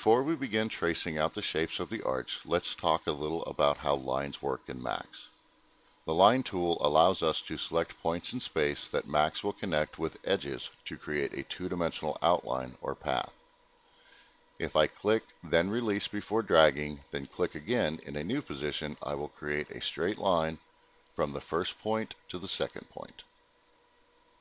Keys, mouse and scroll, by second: 7.2 click, 8.5 click, 11.0 click, 11.7 click, 17.8 click, 20.6 click, 22.7 click.